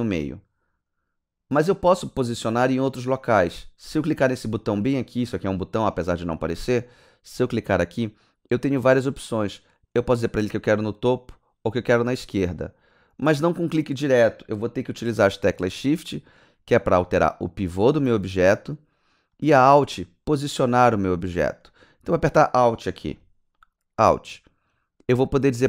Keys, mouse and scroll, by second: 6.7 click, 23.2 alt+click.